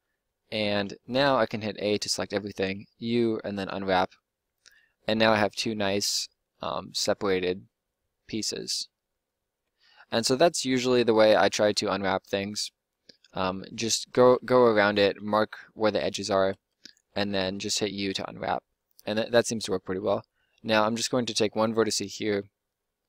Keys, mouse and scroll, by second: 0.6 a, 1.0 a, 2.7 u, 9.5 Tab, 9.9 Tab, 14.5 Tab, 16.4 Tab, 22.4 l.